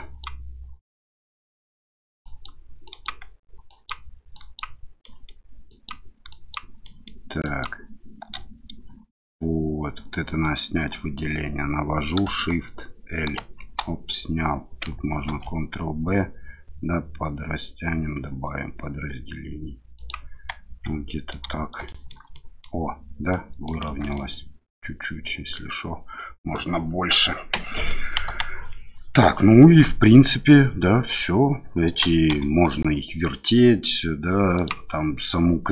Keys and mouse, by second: 2.2 shift+click, 3.0 shift+click, 4.3 shift+click, 5.0 shift+middle click, 5.7 shift+click, 6.3 shift+click, 6.8 shift+middle click, 13.4 shift+l, 15.3 ctrl+b, 20.0 click, 20.7 Tab, 21.1 middle click, 21.9 shift+middle drag, 22.3-22.6 middle drag, 23.3 middle click, 23.8 shift+z, 24.1-25.5 middle drag, 26.5-27.9 middle drag, 28.3 KP_1, 31.1 click, 32.3 r, 34.5 click.